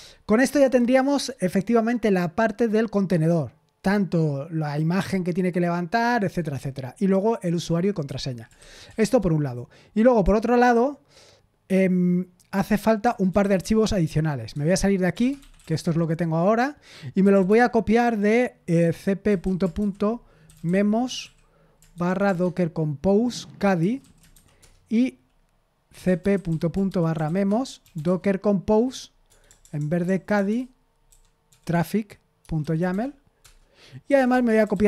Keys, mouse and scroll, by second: 0.0-0.4 typing, 8.0 Escape, 8.3-9.3 typing, 12.7-17.8 typing, 14.5 Return, 19.2-31.4 typing, 31.8 Tab, 32.5-34.8 typing.